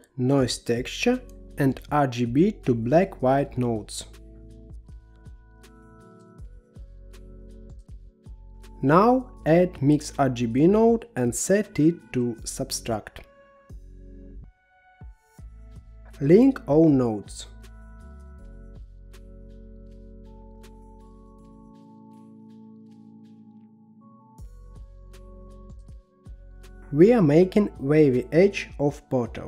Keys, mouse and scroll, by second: 3.3-4.6 drag, 5.4 shift+a, 7.9 click, 8.6-10.1 middle drag, 10.1 shift+a, 14.5-15.9 drag, 15.9-17.5 middle drag, 17.5-19.6 drag, 19.6-20.6 middle drag, 20.6-22.7 drag, 22.9-23.8 scroll up 4, 23.8-26.9 drag, 26.9-28.1 middle drag, 28.1-29.4 scroll down 10.